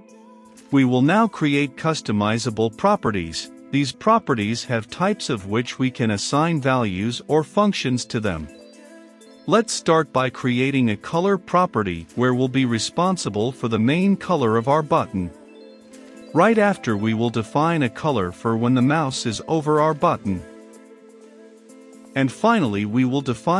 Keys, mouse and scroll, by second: 3.1 Return, 3.9 Up, 4.4 click, 4.9-7.5 typing, 5.0 Caps_Lock, 8.2 Return, 8.6 Caps_Lock, 8.9-10.2 typing, 9.3 Return, 10.7 click, 11.6-12.8 typing, 13.3 click, 14.0 ctrl+v, 14.8 click, 15.9 Return, 16.6-19.9 typing, 17.0 Return, 18.0 click, 20.8 click, 21.4 ctrl+v, 21.7 click, 22.1 Return, 22.8-23.5 typing, 23.3 Return.